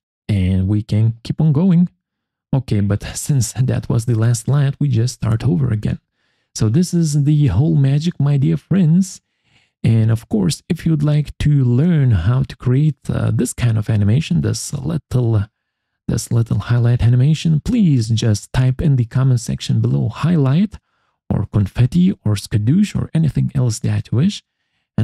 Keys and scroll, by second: 6.4 Escape, 24.9 Escape.